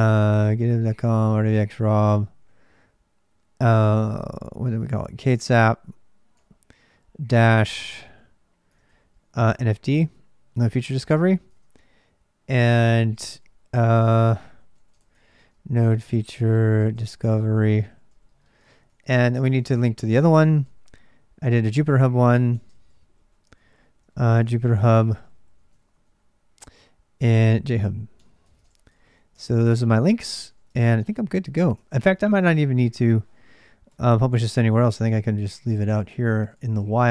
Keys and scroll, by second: 0.1-1.8 typing, 4.9-9.6 typing, 10.7-13.1 typing, 14.2-37.1 typing, 29.1 ctrl+[, 30.0 ctrl+[, 31.6 ctrl+[, 31.9 Return, 35.9 ctrl+[, 36.3 Return.